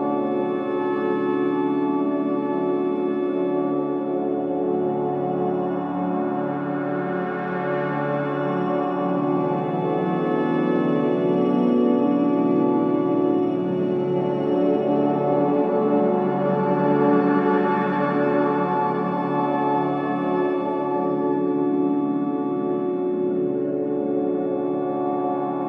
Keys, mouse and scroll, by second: 0.1 scroll up 1, 0.8 scroll down 1, 1.8 click, 2.2-2.5 scroll up 1, 4.4 scroll down 1, 8.4 scroll up 1, 9.2 scroll down 1, 11.2 ctrl+s, 13.4 scroll up 1, 14.2 typing, 14.2-14.7 scroll down 1, 16.6 scroll up 1, 17.0 click, 17.5-18.5 scroll up 2, 18.5-19.2 scroll down 1, 19.4 scroll up 1, 25.5-25.6 scroll down 1.